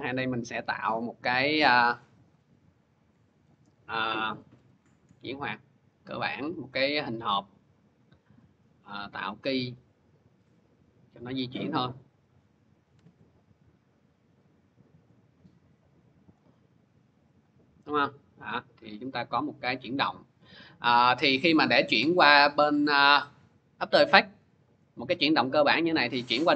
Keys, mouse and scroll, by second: 0.5 click, 0.9 click, 3.3 click, 3.6-6.0 scroll, 6.2 click, 8.8 click, 11.0 click, 12.1 click, 12.9 ctrl+z, 14.9 click, 16.2 click, 17.2 click, 20.2 click, 24.8 click, 25.9 click.